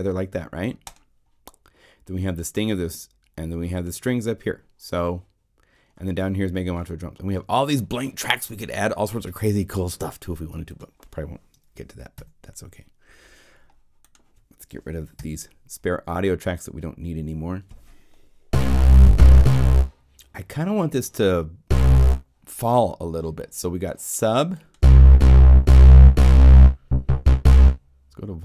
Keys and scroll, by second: 12.1 BackSpace, 15.1 BackSpace.